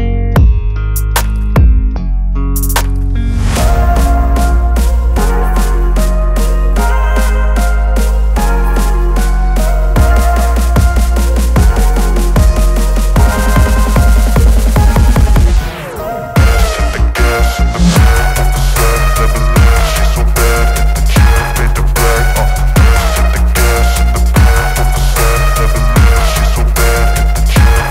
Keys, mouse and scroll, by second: 0.2 right click, 2.4 click, 9.0 click, 12.2 click, 12.5 ctrl+i, 15.7 right click, 16.8 click, 18.2-18.6 alt+scroll up 1, 18.8 space, 18.9-19.5 click, 19.8-21.6 alt+right click, 21.8 space, 21.9-22.6 click, 22.4 space, 24.9-27.0 drag.